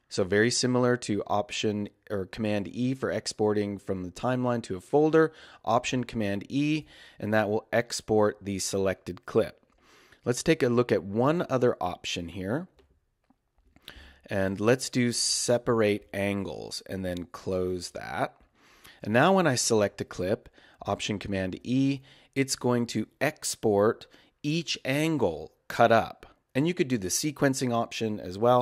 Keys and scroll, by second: 5.9 alt+super+e, 21.5 alt+super+e.